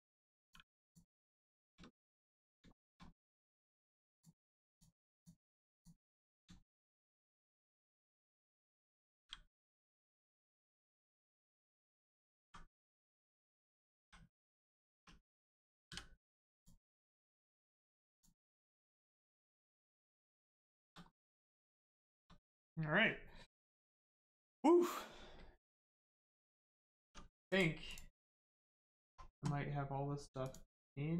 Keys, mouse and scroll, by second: 0.4 click, 1.5 shift+middle click, 2.1 scroll down 1, 2.8 shift+middle click, 4.1 click, 6.6 shift+middle click, 7.6 middle click, 7.7 middle click, 8.0-8.7 scroll down 1, 9.1 g, 9.7 right click, 10.1 scroll up 1, 11.0 middle click, 12.4 x, 13.4 click, 16.5 click, 17.8 Tab, 18.1 click, 18.6 middle click, 19.9 scroll down 1, 20.6 shift+middle click, 21.6 scroll up 1, 22.0 shift+middle click, 26.3-26.7 scroll down 1, 26.7 middle click, 27.0 Tab, 27.5 click, 28.2 middle click, 30.4 shift+click.